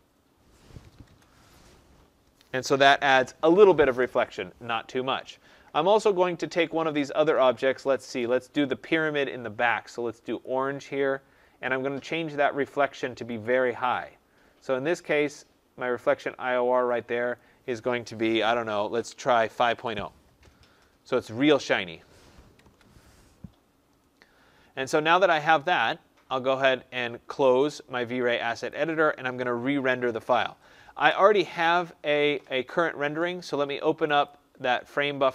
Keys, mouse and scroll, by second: 1.0 Tab, 8.1 click, 10.3 click, 13.4 click, 16.1 click, 17.3 click, 19.1-20.2 typing, 22.5 Tab, 28.6-33.7 drag, 34.2 click.